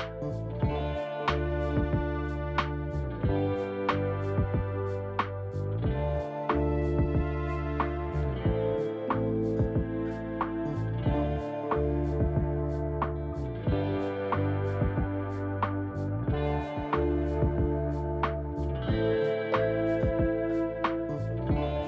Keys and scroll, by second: 4.7 ctrl+d.